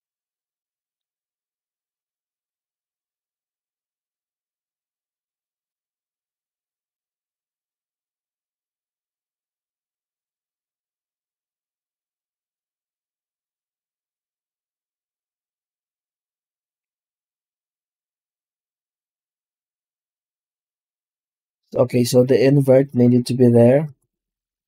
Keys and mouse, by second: 0.1 middle click, 1.2 z, 4.9 middle click, 11.4-12.6 middle drag, 14.9 middle click, 15.8 click, 16.7 m, 18.3 m, 20.2 z, 24.1 z.